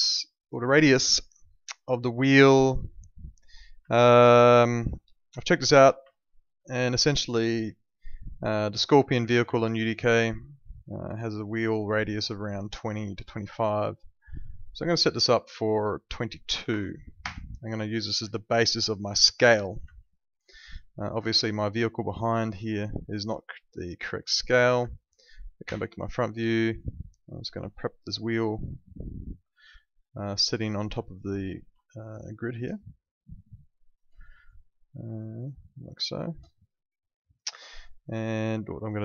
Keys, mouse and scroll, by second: 0.7 alt+middle click, 1.7 alt+middle click, 2.6 click, 3.9 alt+middle click, 5.4 click, 6.1 alt+middle click, 7.1 alt+middle click, 8.2 alt+middle click, 9.6 alt+middle click, 11.2 alt+middle click, 15.0 click, 16.5 2, 17.2 Return, 18.3 alt+middle click, 19.2 alt+middle click, 19.9 alt+middle click, 20.5 alt+middle click, 21.3 alt+middle click, 22.3 alt+middle click, 23.8 click, 24.9 alt+middle click, 25.6 f, 26.0 middle click, 27.6 click, 31.6 ctrl+2, 37.5 Escape, 38.2 click, 38.6 middle click.